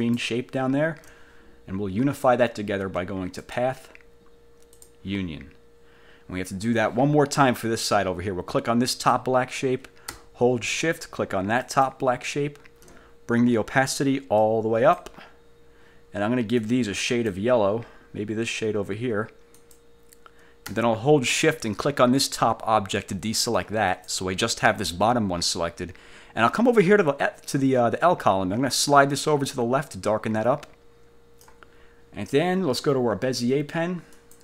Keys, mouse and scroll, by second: 0.1 shift+click, 3.5 click, 4.8 click, 9.0 click, 11.7 shift+click, 14.5 click, 16.7 click, 19.6 click, 24.0 shift+click, 28.9-31.8 drag, 34.3 click.